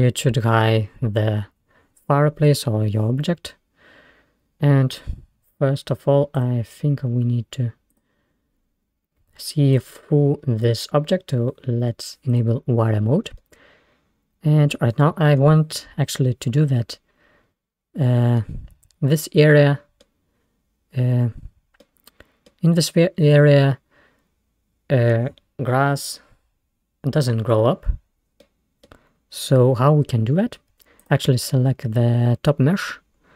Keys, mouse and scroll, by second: 0.9-1.5 scroll up 2, 6.4 click, 8.0-8.4 drag, 8.4-9.8 scroll down 7, 9.8-12.5 drag, 13.5-15.1 middle drag, 15.1-15.7 scroll up 3, 16.1-16.7 scroll up 1, 17.0 scroll down 2, 18.5-21.2 middle drag, 21.9-24.6 middle drag, 28.5-31.1 middle drag, 31.1 click, 31.7-32.2 scroll down 5, 32.5-33.3 scroll up 4.